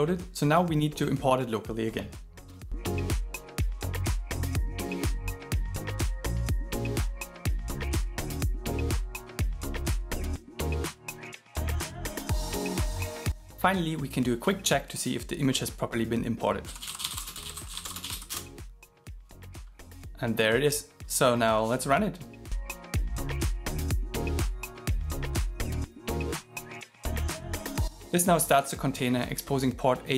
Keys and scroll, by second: 24.4 shift+., 26.8 shift+8.